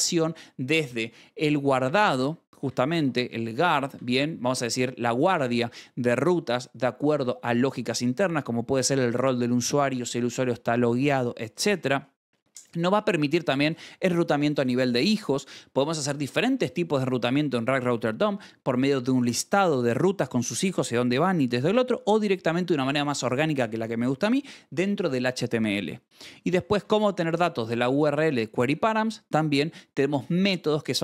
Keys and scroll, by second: 2.1 Escape, 2.4 j, 3.0 Escape, 3.8 v, 4.5 Escape, 13.5 shift+v, 26.4 j, 26.7 shift+v.